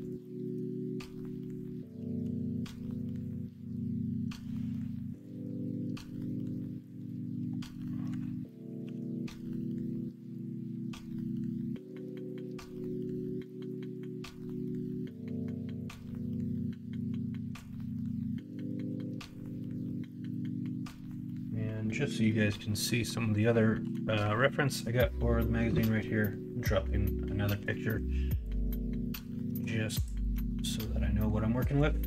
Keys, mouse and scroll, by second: 2.2 x, 5.7 middle click, 7.6 middle click, 8.8 ctrl+r, 11.7 middle click, 22.8 middle click, 23.8 KP_1, 24.2 KP_3, 30.3 Tab.